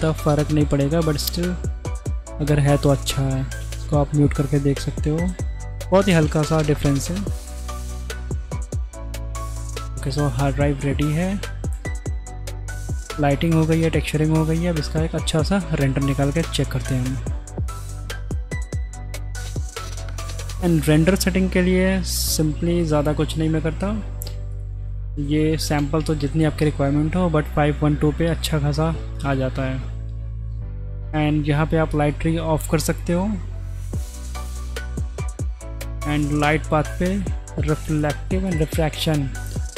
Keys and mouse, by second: 0.4 click, 3.6 m, 4.7 m, 7.4 click, 8.3-9.0 middle drag, 9.7 shift+click, 10.3 middle click, 11.2 click, 14.1 middle click, 17.4 z, 24.5-26.1 drag, 31.9 click, 32.7 click, 34.1 click, 35.1 click, 36.0 click, 37.9 click, 38.4 click.